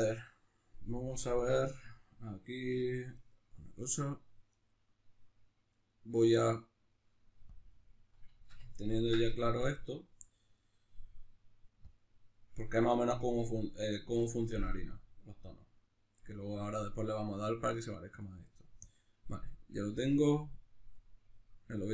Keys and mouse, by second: 1.2-8.4 drag, 8.4-9.6 ctrl+shift+middle drag, 9.6-13.1 right drag, 13.1-20.0 middle drag, 20.0 click, 20.8-21.9 drag.